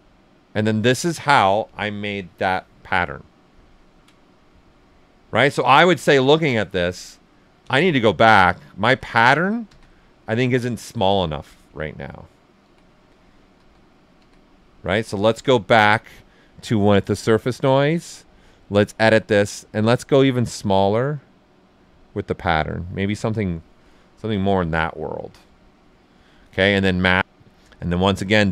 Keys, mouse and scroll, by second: 0.4 click, 3.6 ctrl+right click, 6.0 ctrl+z, 11.9 ctrl+right click, 12.6 ctrl+z, 16.8-23.3 drag, 23.3 click, 24.4-27.2 right drag, 26.8 click, 27.9 click.